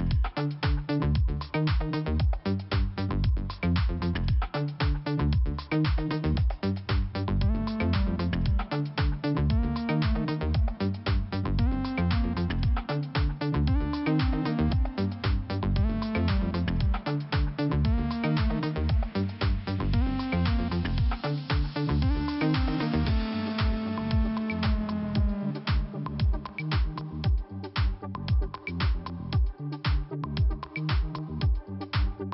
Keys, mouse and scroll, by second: 4.5 middle click, 6.6 click, 8.3 click, 8.5 click, 8.6 click, 9.0 scroll down 2, 9.5 middle click, 11.9 middle click, 15.7 middle click, 17.4 click, 17.5 click, 18.6-19.1 scroll up 1, 20.0 middle click, 23.7 click, 24.4-25.1 scroll up 1, 25.1 click, 26.0 click, 26.7 click, 27.5 click, 29.2 click, 30.4 click, 32.1 click, 32.2 click.